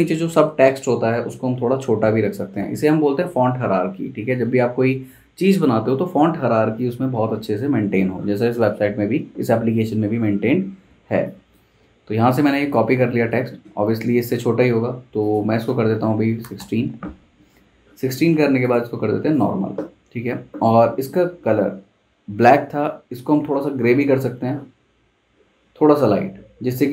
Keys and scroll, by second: 11.7 super+z, 15.8-17.9 typing, 16.6 Return.